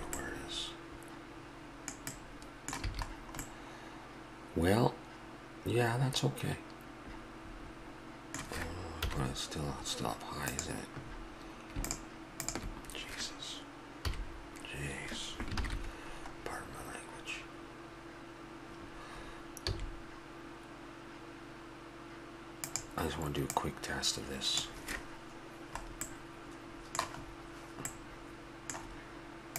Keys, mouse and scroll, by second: 0.2-2.0 middle drag, 2.2 middle click, 2.9 a, 5.1 middle click, 9.0 KP_1, 10.5-12.6 drag, 12.6-14.4 middle drag, 14.0 KP_3, 15.6 ctrl+KP_3, 16.4-17.4 middle drag, 19.7 s, 23.5 click, 26.1-28.2 middle drag.